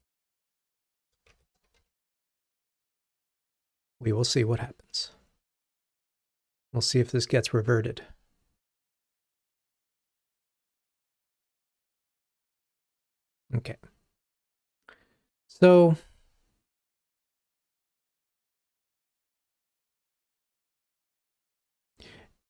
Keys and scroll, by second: 1.9 super+v, 5.1 ctrl+r.